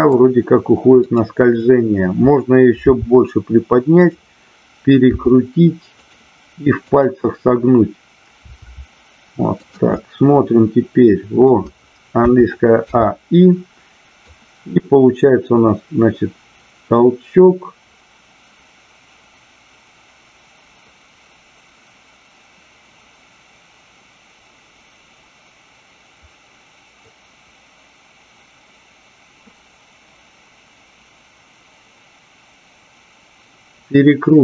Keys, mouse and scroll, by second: 1.0 click, 4.0 click, 6.7-8.1 drag, 8.5 r, 9.6 click, 9.8-11.5 middle drag, 14.2-34.4 drag.